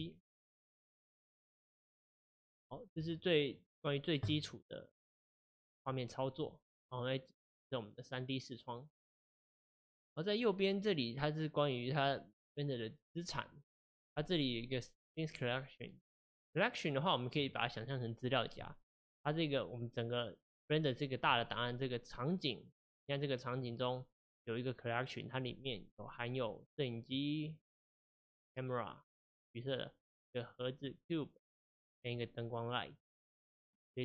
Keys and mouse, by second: 0.0-8.9 shift+middle drag, 27.5-32.0 drag.